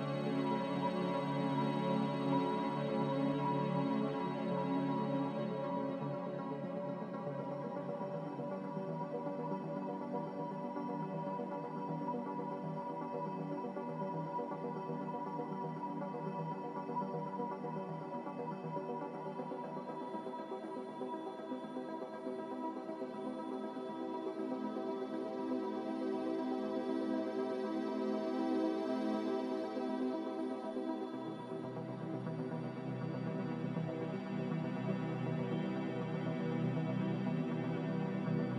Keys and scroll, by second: 4.9 ctrl+z, 17.1 f, 20.4 f.